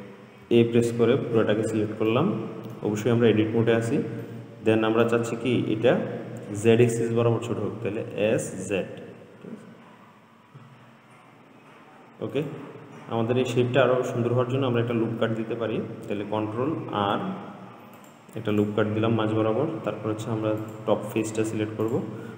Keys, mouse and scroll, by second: 0.7 a, 2.4-7.6 middle drag, 8.4 s, 17.0 ctrl+r, 20.9 click, 21.6 middle click, 22.1 click.